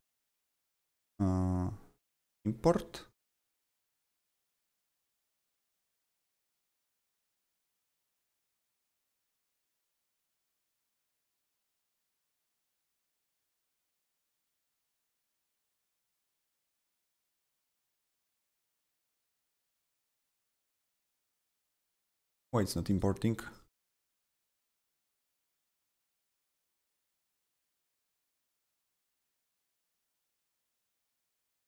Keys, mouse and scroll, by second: 0.9 right click, 0.9 right click, 2.2 click, 3.6 click, 3.7 click, 4.3 click, 5.8 click, 5.9 double click, 6.7 click, 6.9 double click, 9.6 click, 14.3 click, 14.9 click, 18.4 click, 19.2 click, 19.3 double click, 21.1 click, 22.2 click, 22.9 right click, 24.8 click, 25.7-28.3 drag, 26.0 right click, 28.3-30.6 drag, 28.5 right click, 30.6 click.